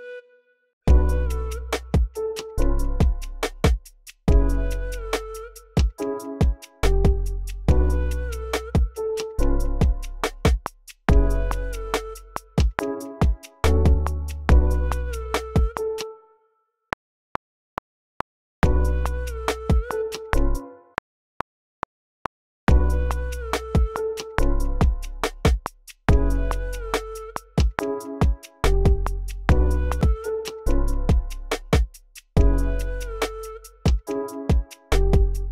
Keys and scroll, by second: 0.6-1.6 typing, 4.0-5.3 typing, 7.6-9.5 typing, 10.7-12.1 typing, 14.2-16.8 typing, 16.3 super+z, 18.3-20.8 typing, 20.6 super+z, 22.3-24.3 typing, 26.0-27.4 typing, 29.4-30.4 typing.